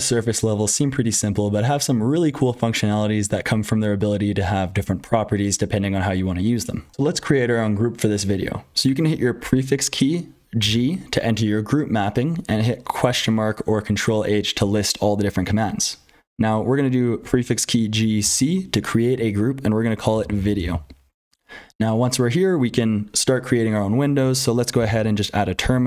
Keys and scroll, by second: 0.0-25.8 typing, 6.9 F12, 9.4 ctrl+z, 17.2 ctrl+z, 21.2 Return, 24.1 ctrl+z.